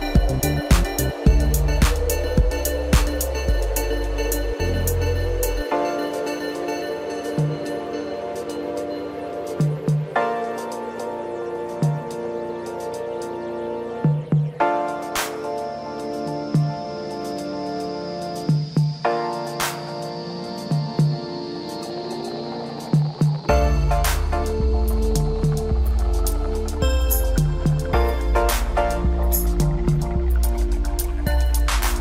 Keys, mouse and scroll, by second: 0.8 click, 1.5 click, 1.9-3.1 middle drag, 3.1 click, 3.5-4.8 middle drag, 4.8 ctrl+KP_Add, 5.4 ctrl+KP_Add, 6.8 click, 7.3 click, 7.8 middle click, 9.0 click, 10.1 l, 11.5 click, 12.1 click, 12.5-14.8 middle drag, 13.7-14.8 scroll up 2, 14.8 click, 15.8 click, 17.0 shift+click, 17.6 shift+click, 19.1 drag, 19.7 click, 20.1 scroll down 4, 20.4-21.8 middle drag, 21.8 Tab, 22.3-23.1 middle drag, 23.1 click, 24.5 drag, 26.1 click, 30.1 click, 30.6-31.1 middle drag, 31.1-31.8 scroll up 1, 31.8 Tab.